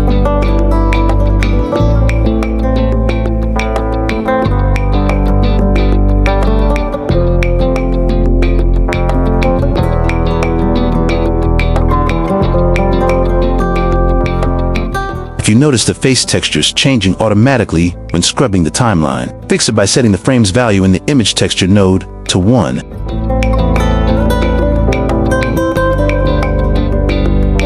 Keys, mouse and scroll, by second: 0.0 g, 0.3 click, 2.1 click, 2.6 click, 2.8 g, 4.9 click, 5.6 click, 5.9 click, 6.4 click, 7.0 click, 8.9 q, 9.9 g, 11.3-11.9 right drag, 13.5 g, 13.8 click, 14.2 click, 17.2 q, 20.0 click, 21.7 shift+middle click, 22.7 click, 27.4 click.